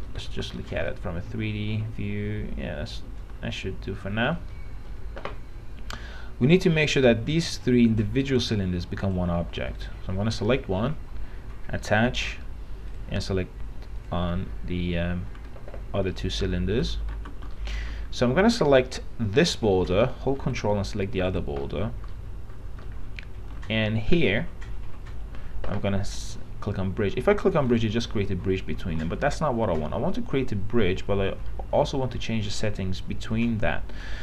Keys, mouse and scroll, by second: 0.3 middle click, 0.8 scroll down 1, 1.7-6.1 alt+middle drag, 7.1-15.3 drag, 15.5 w, 17.4 alt+x, 17.7 alt+middle click, 19.0 click, 20.7 alt+middle click, 21.4 ctrl+click, 21.9 middle click, 22.0-22.3 scroll up 1, 22.3-23.8 middle drag, 27.9 click, 28.9 ctrl+z.